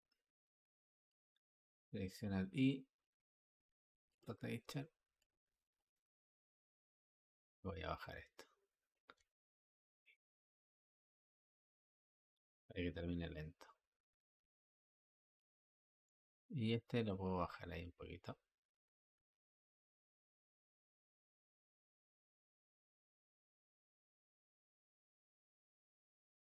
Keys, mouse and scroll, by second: 9.8-12.8 drag, 16.5-17.4 drag, 19.9-23.0 drag.